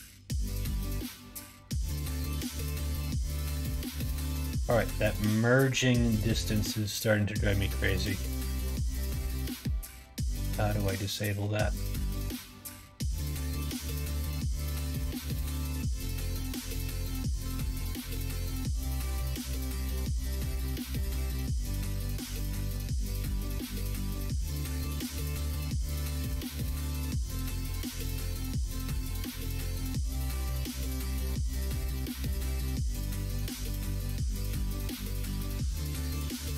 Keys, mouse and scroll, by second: 0.6 s, 1.7 ctrl+z, 2.2 middle click, 3.0 middle click, 7.4 middle click, 9.1 middle click, 14.3 click, 16.4-21.1 drag, 22.1 middle click, 23.3 s, 24.3 ctrl+z, 31.4 middle click, 32.6 middle click, 33.5 shift+middle click, 34.5-36.2 middle drag.